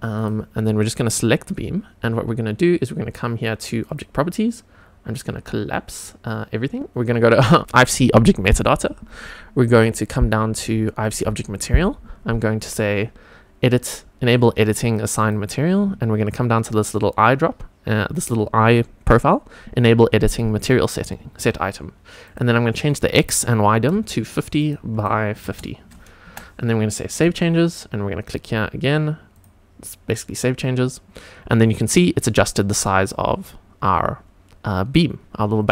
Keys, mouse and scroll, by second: 0.1 click, 1.0 click, 3.9 click, 5.4-6.0 drag, 7.6 click, 9.7 click, 11.0 click, 15.2 click, 20.6 click, 22.2-24.6 drag, 24.9-26.3 drag, 27.1 click, 29.3 click, 31.8-32.4 scroll up 2, 34.7 scroll down 1.